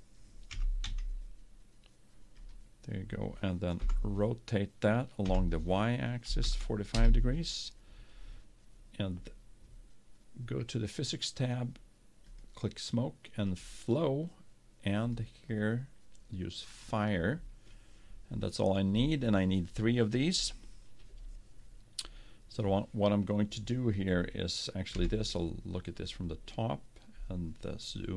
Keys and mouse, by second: 0.9 s, 4.0 r, 12.5-17.2 drag, 25.2 KP_7, 26.8-28.1 drag.